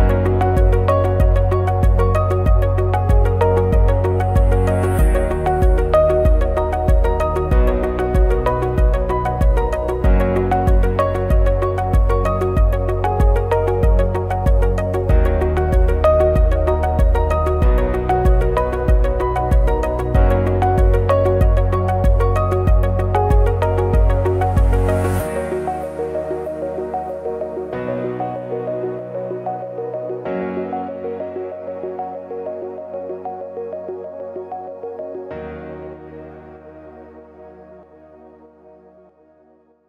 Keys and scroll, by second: 0.5 ctrl+c, 0.6 ctrl+f, 0.8 ctrl+shift+], 5.9 ctrl+shift+a, 6.4 Delete, 8.0 BackSpace, 8.6 Return, 10.9 BackSpace, 11.3 2, 11.5 Return, 12.1 ctrl+shift+a, 16.0 ctrl+shift+a, 20.3 ctrl+shift+a, 21.4 ctrl+g, 21.9 ctrl+-, 23.6 ctrl+=, 27.1 ctrl+c, 27.2 ctrl+f, 30.2 ctrl+f, 32.6 ctrl+c, 32.7 ctrl+f, 34.9 ctrl+f, 37.2 ctrl+f.